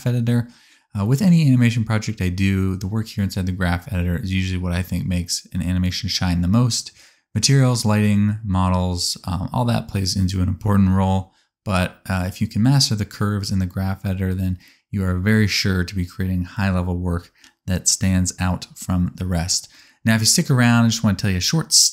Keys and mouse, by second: 2.1 alt+a, 2.6-4.6 middle drag, 2.6 a, 16.7 click, 20.6-21.9 shift+drag, 21.4 space.